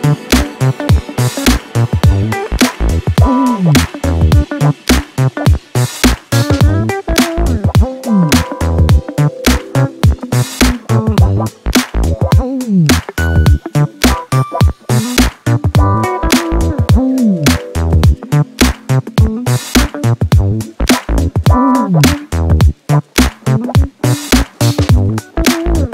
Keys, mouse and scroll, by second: 0.2-0.5 scroll up 1, 1.6 click, 2.5 click, 3.3 click, 3.9 click, 5.1 click, 5.9 click, 6.3 click, 6.9 click, 8.3 click, 9.2 click, 10.0-12.9 drag, 16.5-17.6 drag, 18.3 click, 18.8-20.2 drag, 22.2 click, 23.4 click, 23.9-25.9 drag.